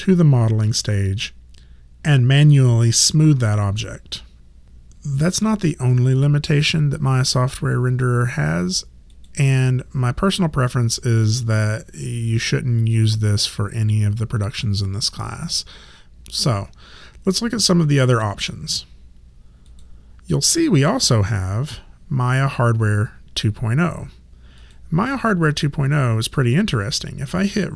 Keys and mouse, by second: 9.1 click, 19.7 click, 24.6 click.